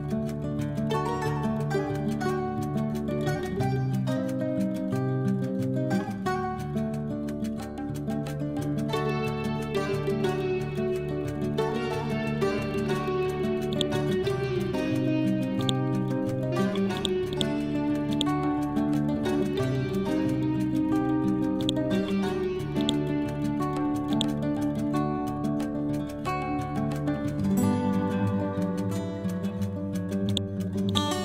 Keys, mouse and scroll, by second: 0.0-0.6 typing, 1.8-4.8 typing, 6.0 shift+Left, 9.1-11.3 typing, 12.2 scroll down 1, 13.6-21.5 drag, 21.5-25.6 drag, 25.6 b, 26.5 Up, 29.4 ctrl+g, 30.1 shift+click, 30.5 c, 30.8 click.